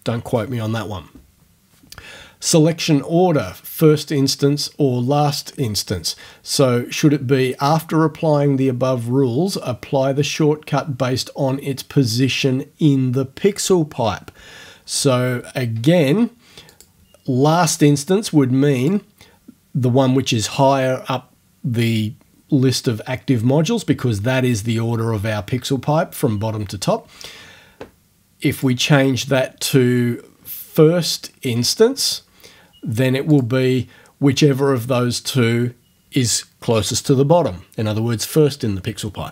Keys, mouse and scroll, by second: 16.7 click, 18.8 click, 28.6 click, 31.1 click, 31.8 scroll up 2, 33.3 click, 35.2-39.3 middle drag.